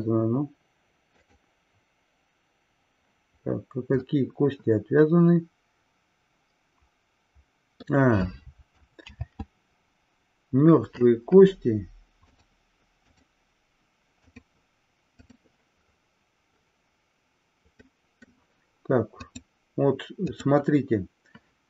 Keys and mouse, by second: 1.7 click, 4.2-8.1 middle drag, 9.8 ctrl+z, 12.2-13.2 drag, 14.3-15.9 drag, 18.1-18.5 middle drag, 19.5-21.2 drag.